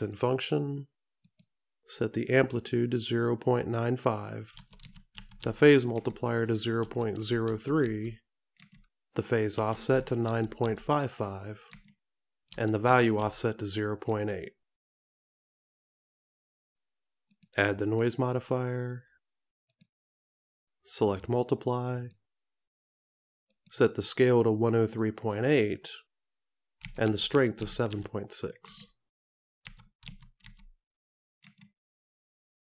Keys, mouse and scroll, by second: 0.2 click, 2.6 click, 18.0 click, 22.0 click, 25.1 click.